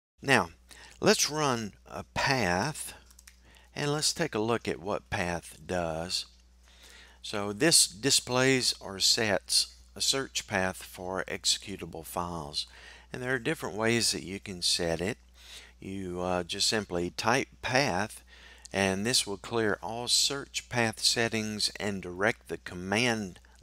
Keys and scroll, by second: 3.7 typing, 4.9 typing.